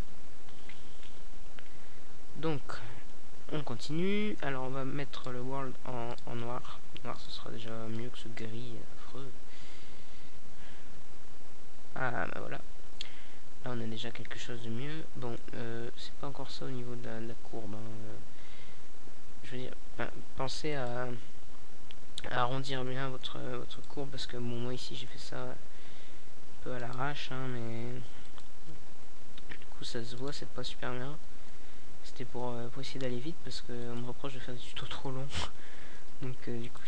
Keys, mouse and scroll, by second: 3.9 Tab, 4.7 Tab, 5.2-6.9 drag, 5.9 Tab, 9.1 s, 11.4-12.8 drag, 12.8 middle click, 13.5 right click, 13.6 s, 14.7-16.6 drag, 16.8 Tab, 18.2-19.5 right drag, 20.2 Tab, 20.8 right click, 21.6 s, 22.9 click, 23.5 Tab, 25.7 alt+a, 35.3 alt+a.